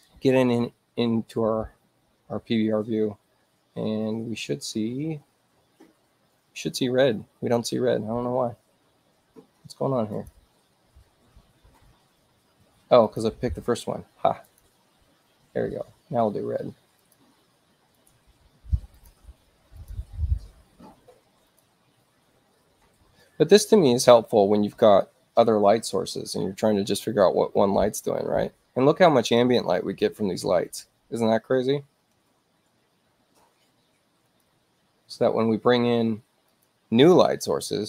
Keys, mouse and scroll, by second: 10.2 click, 13.1 click, 14.5 click, 17.1 click, 18.0 click, 19.0 click, 19.8 click, 21.5 click, 34.3 click, 36.6 click.